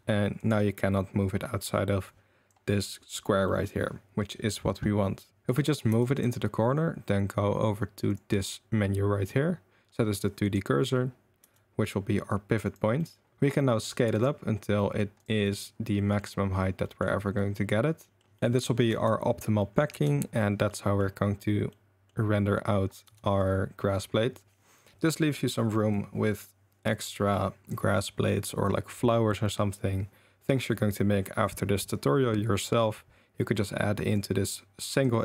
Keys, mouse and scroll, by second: 2.1-2.5 right drag, 3.6 click, 5.4-5.8 drag, 5.4 r, 5.9 g, 8.1-10.6 drag, 11.4 r, 13.1 drag, 13.3 r, 13.3 s, 13.4 click, 13.8 s, 14.8 drag, 15.2 click, 15.4 drag, 15.9 click, 17.3 drag, 18.1 click, 18.4 Tab, 18.4 s, 18.4 a, 18.9 Tab, 19.6 click, 19.9 Tab, 20.7-21.0 drag, 21.7 click, 23.0 Tab, 25.9-27.7 drag, 34.2-35.0 drag.